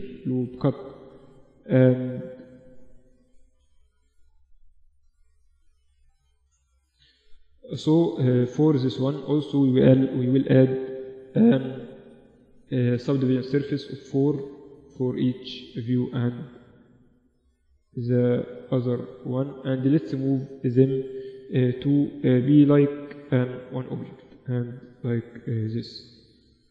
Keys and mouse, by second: 0.8 Tab, 1.0 Tab, 1.2 middle click, 3.7 Tab, 6.8 middle click, 7.1 Tab, 7.8-10.4 drag, 9.5 ctrl+3, 13.3-15.5 drag, 15.5-16.7 middle drag, 16.8-20.0 middle drag, 20.0 click, 20.9 r, 22.9-26.1 drag, 26.1-26.7 middle drag.